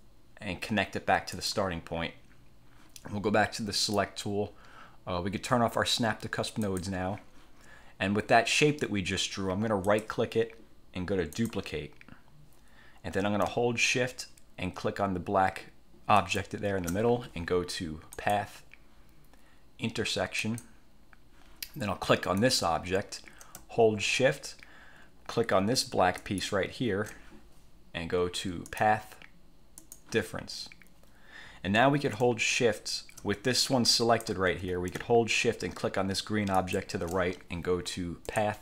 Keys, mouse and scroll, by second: 1.5 click, 3.9 click, 6.7 click, 10.0 click, 11.5 click, 16.3 shift+click, 18.3 click, 20.5 click, 22.5 click, 26.3 shift+click, 28.8 click, 29.9 click, 33.8-34.6 shift+drag, 34.7 ctrl+z, 36.7 shift+click, 38.5 click.